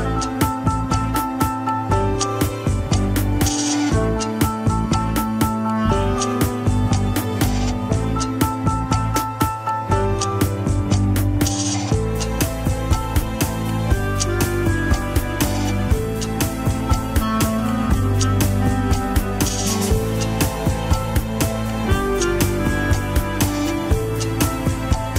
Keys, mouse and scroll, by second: 0.7 KP_1, 1.2 alt+z, 1.5 alt+z, 1.8 r, 2.4 alt+z, 3.8-5.3 drag, 5.3 alt+z, 5.6 s, 7.8 alt+z, 8.3 s, 10.7 KP_7, 10.9 scroll up 1, 11.1 alt+z, 11.4 shift+middle click, 11.6 scroll up 1, 11.8 r, 12.4 shift+scroll down 1, 12.6 shift+middle click, 13.5 s, 16.2 click, 16.5 s, 17.4 click, 17.9 s, 19.7 click, 20.1 shift+click, 20.9 shift+click, 21.6 shift+n, 22.3 shift+middle click, 23.1 click, 23.4 shift+click, 23.7 KP_1, 24.1 scroll down 3.